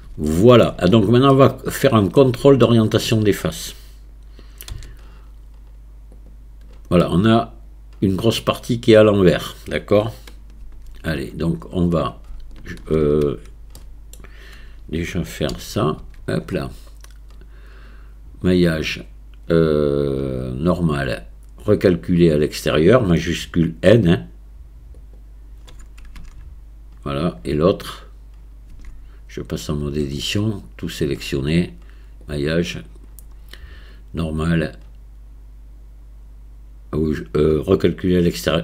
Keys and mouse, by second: 0.3-0.7 shift+middle drag, 1.3-2.2 middle drag, 2.7-3.1 shift+middle drag, 4.7 q, 7.0-9.5 drag, 10.7 Tab, 12.3 shift+middle click, 13.8 click, 15.5 a, 16.0 a, 18.8-25.3 drag, 26.2 Tab, 27.9 click, 28.7 Tab, 32.2-38.6 drag.